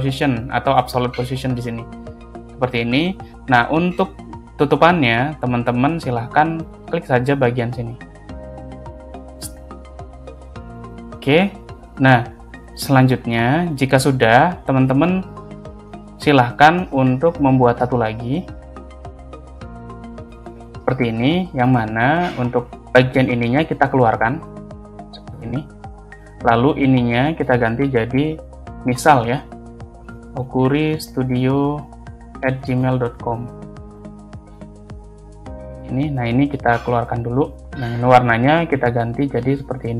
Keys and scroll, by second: 12.9 space, 16.9 ctrl+space, 20.1 ctrl+c, 21.2 space, 29.9 o, 32.3 shift+2, 32.6 g.